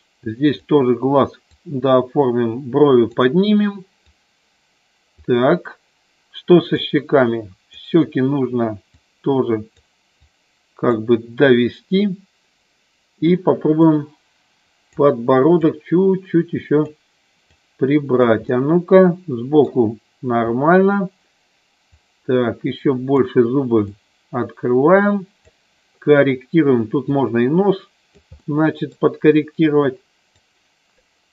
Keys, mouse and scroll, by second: 1.5-3.1 drag, 4.1 click, 6.8 click, 9.0 click, 10.1 click, 13.7-14.9 drag, 15.6-16.9 drag, 17.4 click, 18.4-19.6 middle drag, 21.9-23.1 drag, 23.9-25.4 drag, 27.1-28.3 drag, 28.4 middle click, 29.6 click.